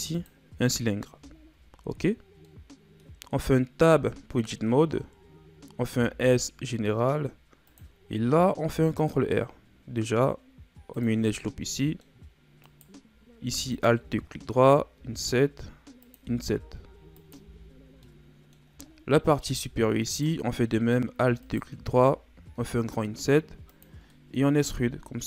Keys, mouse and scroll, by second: 1.3 scroll down 6, 2.4-3.5 middle drag, 3.5-3.9 scroll up 1, 3.9 Tab, 5.9 s, 8.6 ctrl+r, 11.4 middle click, 12.2-12.6 scroll up 2, 12.6 right click, 13.7 alt+right click, 14.9 i, 16.2 i, 17.4 Tab, 17.7-18.0 scroll down 1, 18.0-18.9 middle drag, 18.9-19.5 shift+scroll up 4, 19.5 Tab, 20.0 right click, 21.4 alt+right click, 22.6 i, 24.0 scroll up 1, 24.1 middle click, 24.6 e.